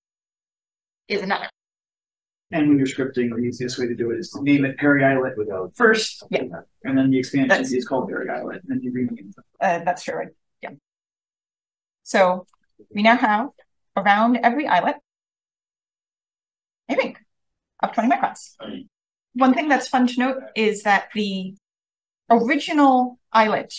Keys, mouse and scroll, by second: 0.7 click, 0.9-1.8 drag, 2.8 click, 3.3 space, 12.1 click, 12.8 click, 13.5 click, 14.3 click, 18.1-18.5 drag, 18.8-19.3 scroll up 1, 19.3 scroll down 1, 21.1-21.5 drag.